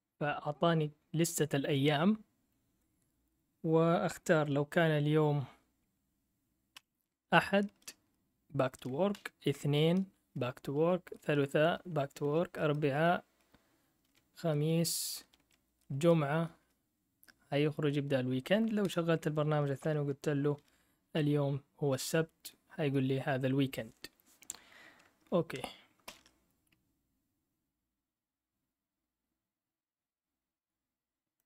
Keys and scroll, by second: 6.7 1, 7.6 Return, 9.1 2, 9.8 Return, 10.7 3, 11.2 Return, 12.2 4, 14.0-15.9 typing, 18.5-19.3 typing, 21.1-22.4 typing, 26.1 ctrl+l.